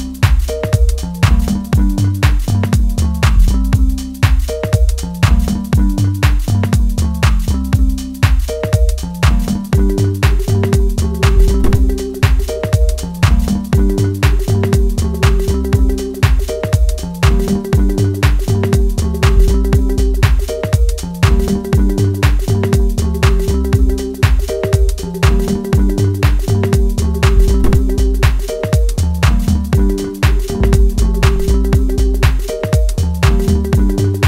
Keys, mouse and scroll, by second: 2.1-5.2 drag, 5.2-8.3 middle drag, 8.2 click, 10.9 click, 19.3-20.2 scroll down 1, 25.2-27.1 middle drag, 27.1-28.7 scroll down 1, 28.7 click, 29.7 middle click, 30.5 scroll down 1, 31.3 middle click, 32.5-34.0 scroll up 1, 34.0 click.